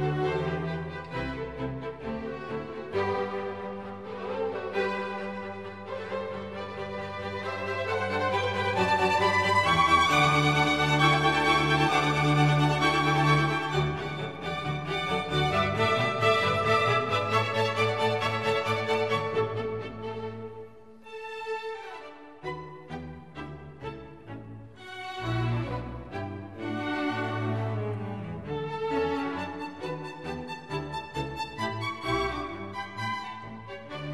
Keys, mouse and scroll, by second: 8.8 ctrl+-, 10.9 ctrl+-, 12.0 shift+click, 13.4 shift+click, 13.6 ctrl+g, 14.7 ctrl+j, 19.4 ctrl+click.